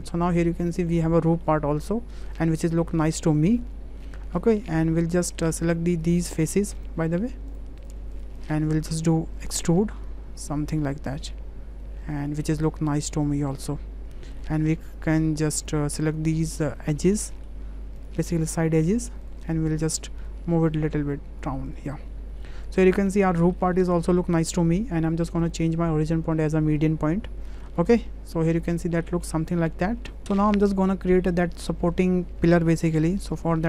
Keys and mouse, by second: 0.9 click, 1.1 Tab, 1.4-2.2 drag, 2.6 drag, 3.5-4.4 drag, 4.9 Tab, 5.2 click, 6.0 click, 6.3 shift+click, 7.8 shift+click, 9.5 e, 12.6 click, 13.0 click, 13.3 click, 13.5 click, 15.2 2, 15.6 click, 16.1 shift+click, 16.6 shift+click, 17.0 shift+click, 17.2 click, 18.4 shift+click, 19.2 shift+click, 19.5 click, 20.3-21.5 drag, 21.7 click, 22.1 Tab, 22.5-22.8 drag, 23.2-23.5 middle drag, 23.7 shift+click, 24.1-24.5 drag, 25.4-26.9 drag, 27.5 shift+click, 27.9-29.1 middle drag, 29.7 middle click, 33.5 `.